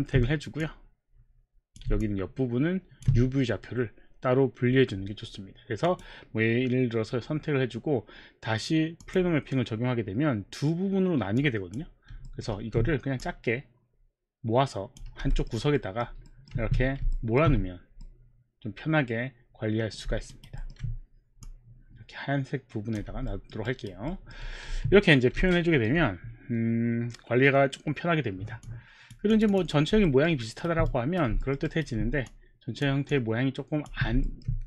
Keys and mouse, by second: 0.6 click, 0.6 alt+middle click, 5.8 click, 9.0 click, 11.4 click, 12.3 alt+middle click, 12.5 alt+middle click, 12.6 r, 13.2 click, 15.1 w, 16.0 alt+middle click, 16.3 alt+middle click, 16.7 alt+middle click, 16.7 w, 17.2 alt+middle click, 18.1 middle click, 20.4 alt+right click, 20.6 alt+middle click, 20.8 alt+middle click, 20.8 alt+right click, 21.2 alt+middle click, 21.2 alt+right click, 21.5 click, 23.3 alt+middle click, 23.6 alt+right click, 24.1 alt+middle click, 24.7 q, 25.5 alt+middle click, 28.7 click, 29.5 click, 30.3 alt+middle click, 30.4 alt+right click, 30.9 right click, 31.4 alt+middle click, 31.6 alt+right click, 32.3 click, 32.3 alt+right click, 33.1 click, 34.2 alt+middle click.